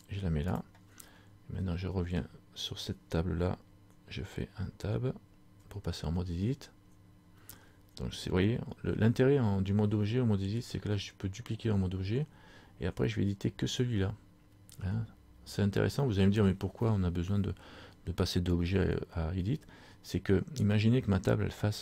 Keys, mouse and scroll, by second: 0.7 click, 1.4 middle click, 5.7 Tab, 7.0-8.3 scroll up 2, 8.3-8.6 scroll up 2, 8.4 shift+middle click.